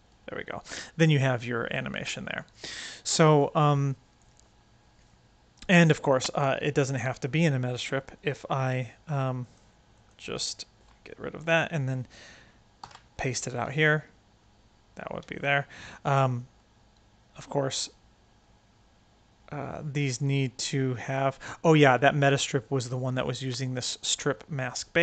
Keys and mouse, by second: 1.7 space, 1.9-3.6 right drag, 5.9 right click, 6.7 click, 7.6 c, 8.6 click, 9.3 click, 10.3 x, 12.7 ctrl+v, 13.6 space, 15.2 space, 15.3-22.2 right drag, 23.2 click.